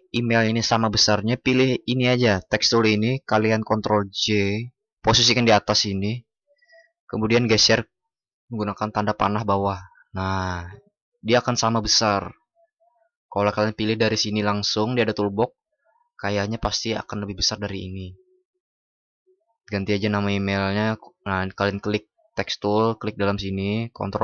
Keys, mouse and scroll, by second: 3.6 ctrl+?, 4.2 ctrl+shift+i, 24.1 ctrl+shift+@.